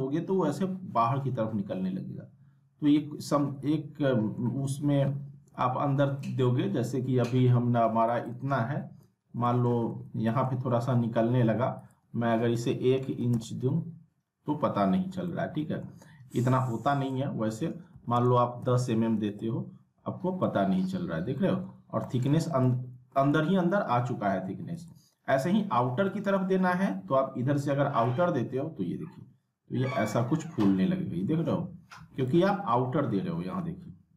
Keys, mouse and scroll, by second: 3.6-4.6 alt+middle click, 4.8 scroll up 1, 5.1 alt+w, 5.7-6.2 scroll down 1, 6.2 middle click, 6.6-8.1 scroll up 1, 8.1 click, 8.9 alt+w, 9.4 middle click, 9.7 alt+w, 10.2 alt+middle click, 11.8 click, 13.1 shift+', 13.3 Return, 15.0 scroll down 1, 15.3-15.9 middle drag, 16.9 click, 18.6 m, 18.7 m, 20.4-21.0 alt+middle click, 21.0 scroll up 1, 21.4 alt+middle click, 21.8 scroll down 1, 22.0 alt+middle click, 22.4 scroll up 1, 22.6-23.2 alt+middle click, 23.1-24.7 scroll up 1, 24.7 right click, 25.9 scroll down 1, 26.0-26.7 alt+middle drag, 28.0-32.4 drag, 32.5 alt+middle click, 33.2 alt+w.